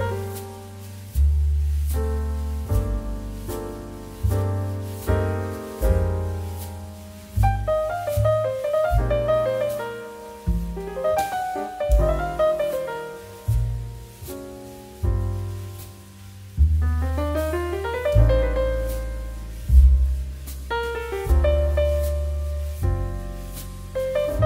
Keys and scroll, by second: 1.3 z, 11.2 c, 14.2 z.